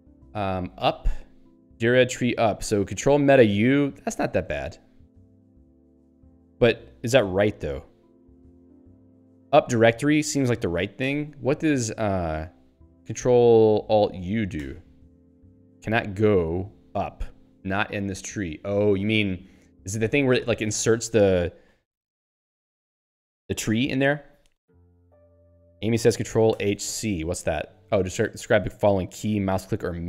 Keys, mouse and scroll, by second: 0.4 ctrl+s, 0.5-1.5 typing, 9.4 Down, 11.2 ctrl+g, 11.6 super+e, 14.6 ctrl+alt+u.